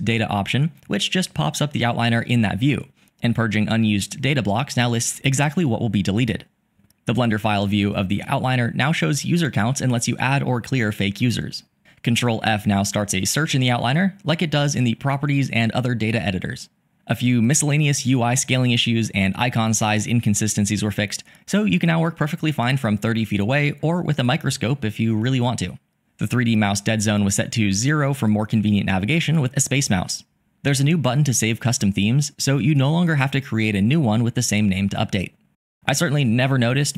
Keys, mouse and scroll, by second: 19.2-22.8 drag.